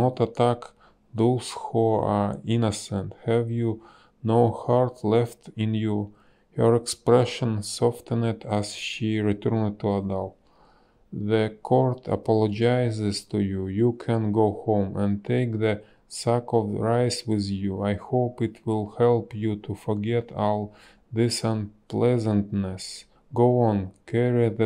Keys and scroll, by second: 1.6 space, 1.7 b, 2.3 space, 7.1 ctrl+z, 12.5 ctrl+z, 19.4 ctrl+z.